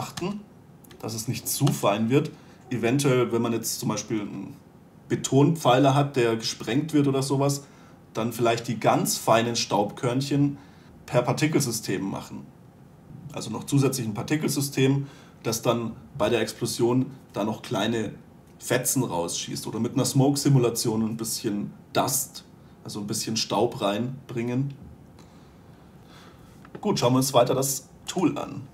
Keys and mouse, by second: 0.4 Delete, 0.7 Return, 1.8 Delete, 28.6 click.